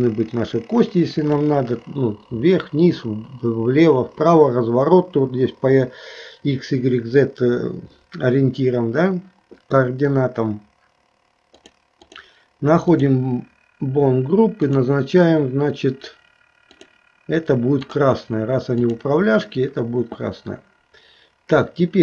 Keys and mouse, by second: 11.6 click, 12.0 click, 12.9 click, 14.7 click, 16.7-18.1 drag, 19.0 click.